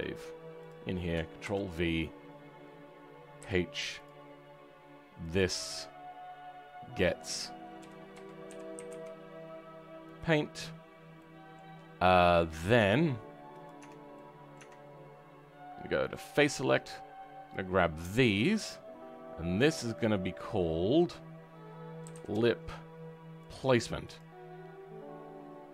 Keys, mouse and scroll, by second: 4.0 click, 10.7-11.1 scroll up 4, 11.1-13.5 middle drag, 13.5 Tab, 14.1 middle click, 14.5 Tab, 17.4 click, 17.7-19.9 middle drag, 19.9-25.7 drag.